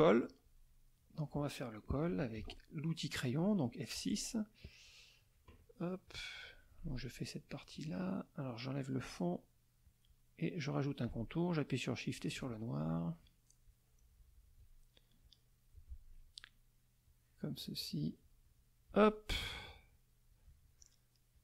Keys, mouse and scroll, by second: 0.6 middle click, 2.4 F6, 2.5 middle click, 4.0 middle click, 6.0 click, 9.0 click, 9.8 click, 11.8 shift+click, 13.6-14.8 drag, 15.2 click, 17.0-19.1 drag, 19.9 click, 21.3-21.4 drag.